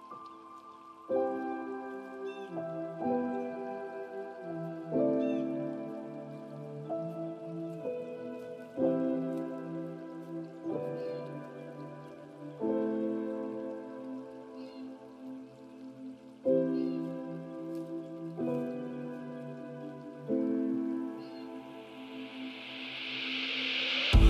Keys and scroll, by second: 3.4 ctrl+alt+s, 16.1 ctrl+alt+s.